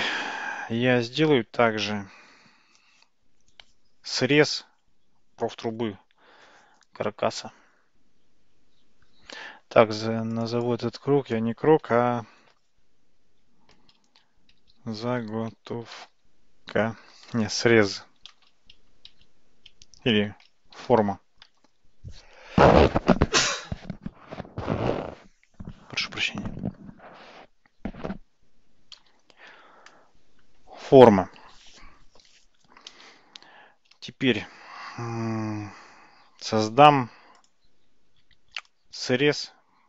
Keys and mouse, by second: 0.2 shift+a, 10.4 click, 10.6-29.4 drag, 34.6 shift+a.